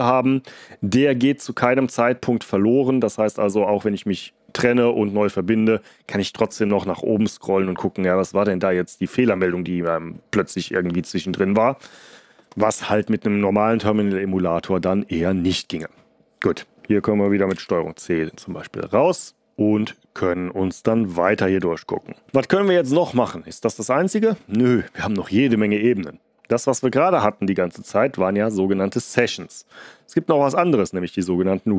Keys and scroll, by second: 17.5 ctrl+c, 22.2 ctrl+l.